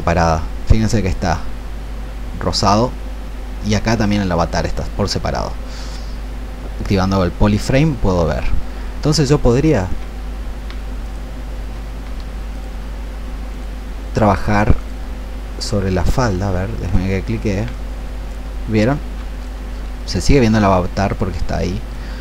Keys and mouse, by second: 9.3 ctrl+shift+click, 10.9 ctrl+shift+click, 12.5-22.2 ctrl+shift+drag.